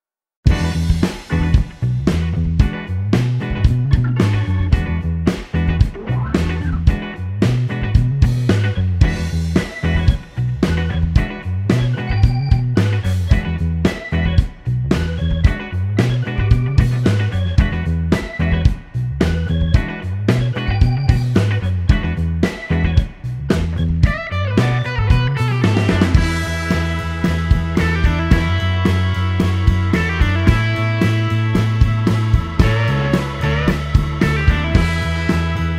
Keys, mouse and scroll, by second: 0.0 a, 1.7 6, 2.0 Return, 4.1-6.5 drag, 7.9 click, 9.4 click, 10.7 a, 12.2-13.1 typing, 15.2-17.4 drag, 19.8 scroll down 1, 20.1 middle click, 21.0 middle click, 21.8 scroll up 1, 23.2 click, 24.7 click, 25.6 click, 27.9 click, 28.7 scroll down 1, 28.9 middle click, 29.7 middle click, 30.1-30.6 scroll up 1, 32.6 middle click, 33.7-35.2 middle drag.